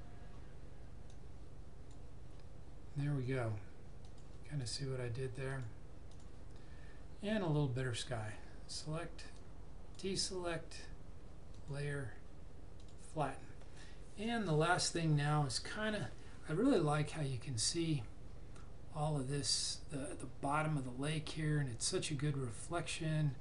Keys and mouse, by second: 1.0 click, 8.6 click.